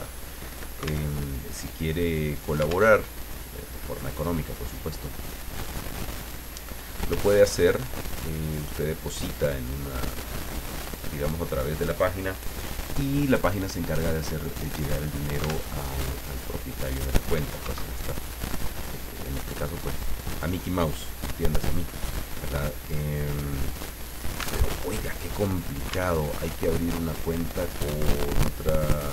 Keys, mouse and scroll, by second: 1.1 ctrl+alt+Tab, 2.9 alt+Tab, 5.6 click, 7.5-11.1 ctrl+drag, 15.0 click, 15.7 alt+Tab, 17.8 alt+Tab, 20.9 click, 22.4 click, 24.7 alt+Tab, 26.1 alt+Tab.